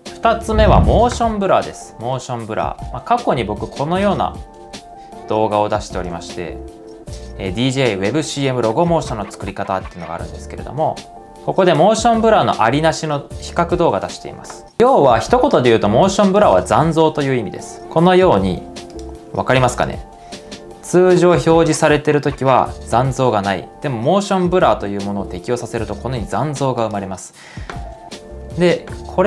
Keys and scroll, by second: 2.2 shift+super+z, 14.6 Left, 28.0 super+z, 28.0 Left, 28.0 space, 28.0 ↻.